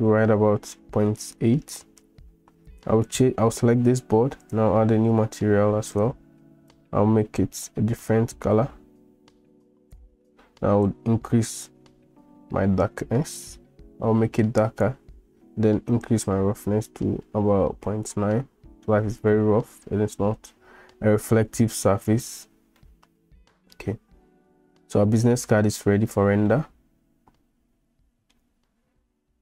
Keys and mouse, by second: 3.1 click, 4.4 drag, 16.1-18.1 drag, 22.9-23.7 middle drag, 26.6-28.4 shift+middle drag.